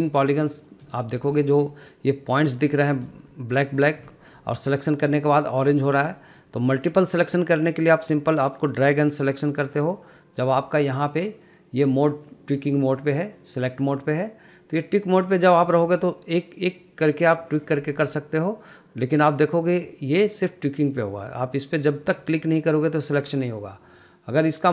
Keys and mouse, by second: 0.1 shift+middle click, 0.9 click, 1.2 middle click, 1.6 shift+middle drag, 2.0 middle click, 2.8 click, 3.1 middle click, 3.4 shift+middle click, 4.0 click, 4.4 shift+middle click, 5.2 click, 5.6 middle click, 6.1 shift+middle click, 6.7 middle click, 8.5-10.0 drag, 11.1-15.6 drag, 16.0 drag, 16.9 click, 17.6 drag, 21.1 drag, 21.8 click, 22.4 click.